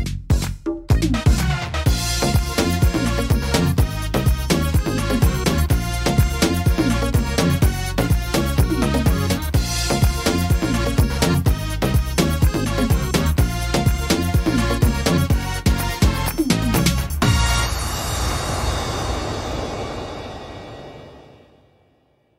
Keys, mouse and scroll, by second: 1.7 x, 3.4 right click, 3.8 x, 5.3 right click, 7.2 e, 10.2 middle click, 10.6-11.8 scroll down 5, 11.3 middle click, 11.9-12.9 scroll up 7, 12.7 middle click, 13.9-14.4 scroll down 5, 14.6 middle click, 15.6 scroll down 2, 15.9 middle click, 17.9-18.4 scroll up 3, 18.3 middle click, 20.4 right click, 21.5 click.